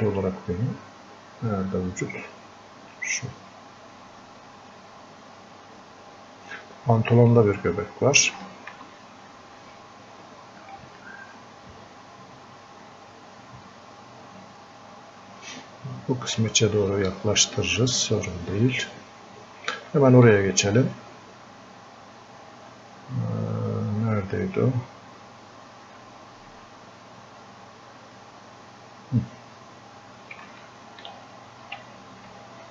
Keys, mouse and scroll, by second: 3.0-8.5 drag, 8.5-11.4 alt+drag, 11.4 alt+click, 13.1-16.2 drag, 16.6-20.0 drag, 28.2 click, 30.6 alt+click, 31.1-32.7 alt+drag.